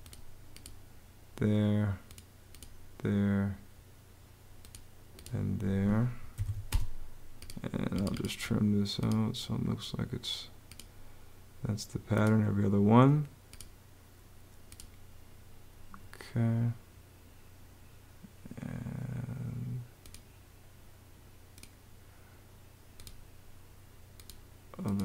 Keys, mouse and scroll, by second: 5.3 Escape, 5.8-6.7 typing.